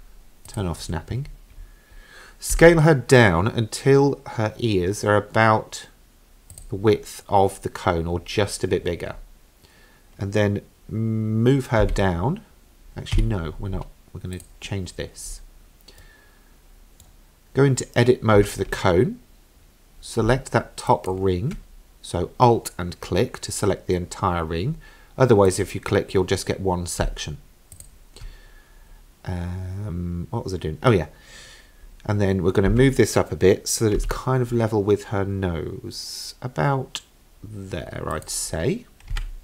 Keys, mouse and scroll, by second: 0.5 click, 2.5 s, 11.8 g, 14.4 click, 15.3 scroll up 2, 16.0-17.1 middle drag, 17.8-18.4 scroll up 2, 18.4 Tab, 20.9 alt+click, 25.5 click, 27.8 alt+click, 32.7 g, 39.2 Tab.